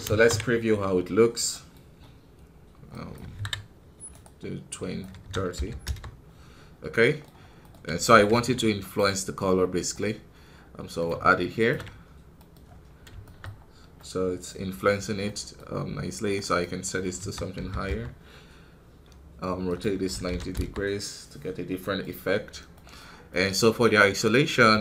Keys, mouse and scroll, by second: 0.0 ctrl+space, 0.7 scroll up 3, 1.5 middle click, 1.7 scroll up 1, 5.7 click, 6.4 scroll down 3, 7.9 right click, 8.2 shift+d, 9.8-12.2 drag, 12.3 middle click, 12.5 scroll up 5, 13.1 shift+middle click, 13.4-13.9 scroll up 2, 13.9-17.8 middle drag, 17.8-21.2 drag, 21.2 scroll down 4, 21.7-24.8 middle drag.